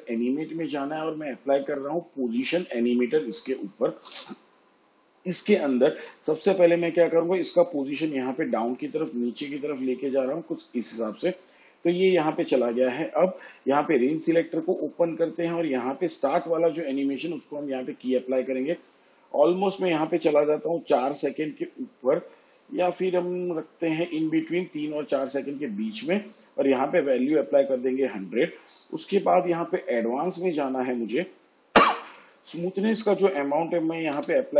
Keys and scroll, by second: 34.2 7.